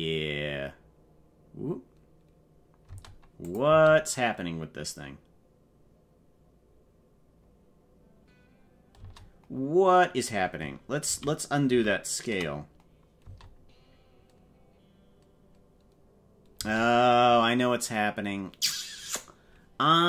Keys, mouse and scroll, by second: 2.9 space, 3.4 click, 3.6 space, 8.9 space, 11.2 ctrl+z, 11.8 ctrl+z, 13.2 space, 16.5 space.